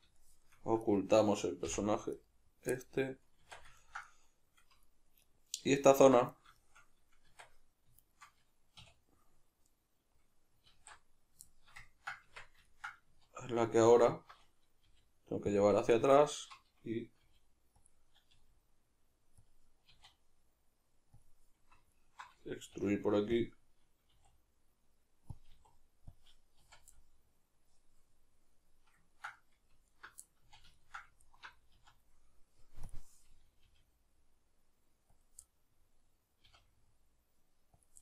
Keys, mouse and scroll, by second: 0.9 right click, 1.7 h, 2.2 right click, 2.8-5.3 middle drag, 3.5 Tab, 5.3 right click, 5.9 alt+right click, 6.6-8.0 shift+middle drag, 7.3 Tab, 8.0 shift+right click, 8.8 \, 9.7 right click, 10.7 alt+q, 11.5-13.9 shift+middle drag, 12.3 Tab, 13.1 z, 13.9 alt+right click, 14.9 g, 15.6 click, 16.1 alt+right click, 17.2 g, 17.9 click, 18.3 g, 19.4 click, 19.9 e, 21.2 click, 21.9 alt+right click, 22.7 g, 23.4 click, 24.1 e, 25.4 click, 25.5 e, 26.2 click, 26.6 z, 27.0-29.9 middle drag, 29.9 alt+right click, 30.5 z, 30.7-31.3 ctrl+middle drag, 31.3 alt+right click, 31.7 z, 32.1-32.9 middle drag, 32.9 drag, 33.7 g, 35.3 click, 35.5-37.9 middle drag, 36.5 g, 37.9 click.